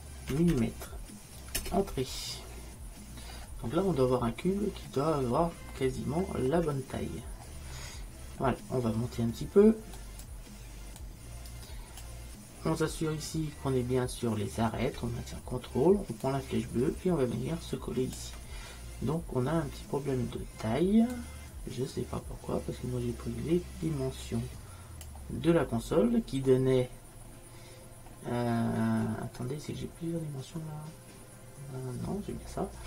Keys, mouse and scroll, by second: 0.6 m, 6.3 middle click, 7.9-9.5 middle drag, 10.0-13.4 drag, 16.3-18.1 drag, 21.2-23.1 drag, 29.4 middle click, 30.6-32.8 middle drag.